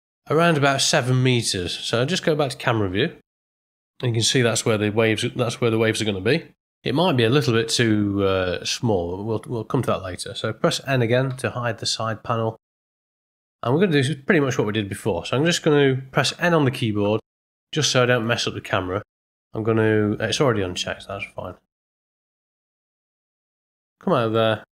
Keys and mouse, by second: 2.2 middle click, 3.0 KP_0, 11.2 n, 16.2 n, 18.2 click, 21.6 n, 23.0-23.4 middle drag, 23.7 ctrl+middle click, 23.9 ctrl+middle click, 24.3 ctrl+middle click, 24.4 ctrl+middle drag.